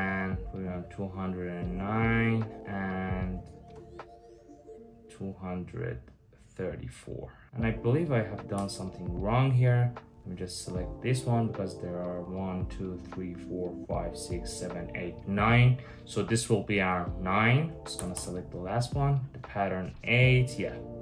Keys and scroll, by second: 8.2 Return, 17.8-21.0 Return.